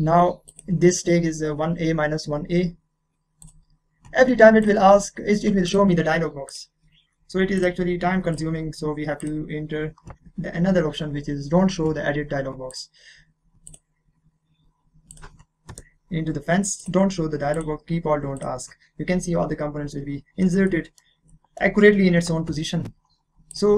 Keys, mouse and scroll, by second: 0.5 click, 3.4 click, 12.7 click, 15.7 Return, 16.8 click, 20.7-23.5 middle drag, 23.5 click.